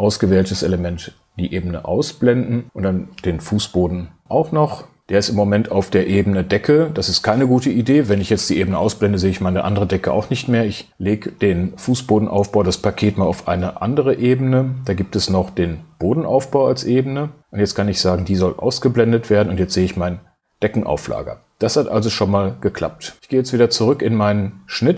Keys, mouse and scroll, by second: 4.3 shift+space.